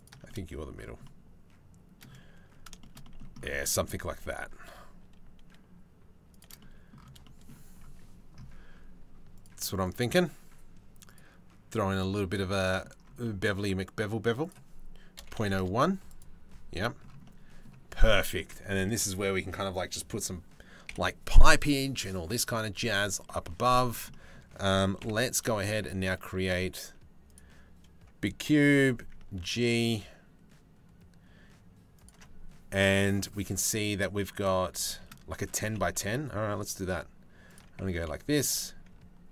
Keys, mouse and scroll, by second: 0.7 middle click, 2.4 shift+middle click, 2.6 middle click, 3.2 middle click, 3.5 click, 3.7 g, 6.2 click, 6.8 click, 10.7-11.7 drag, 12.2 click, 12.8 middle click, 14.1-15.3 middle drag, 15.7 middle click, 16.8 middle click, 20.5 KP_7, 23.7 click, 24.6 KP_7, 25.3 shift+a, 28.4 g, 34.5 shift+middle click, 35.2 g, 37.4 Tab, 38.1 g.